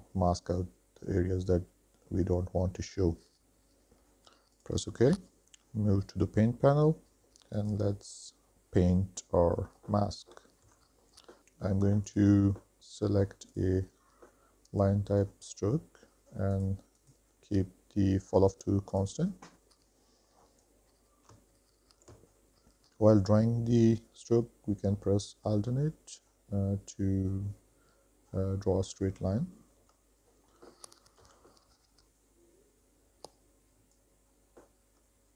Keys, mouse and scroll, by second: 7.8 click, 9.2 middle click, 10.8 KP_1, 11.4-15.9 drag, 16.7-19.6 drag, 20.9-29.5 drag, 30.7 KP_3, 31.6 alt+click, 32.4 alt+click, 33.3 middle click, 33.8 ctrl+z, 34.0 middle click, 34.3 KP_1, 34.5 KP_3, 35.1 shift+middle click.